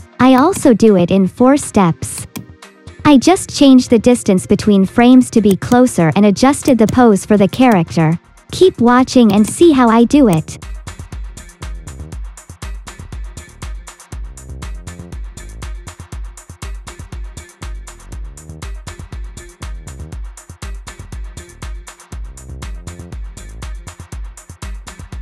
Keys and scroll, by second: 3.9 ctrl+c, 4.2 ctrl+v, 6.1 t.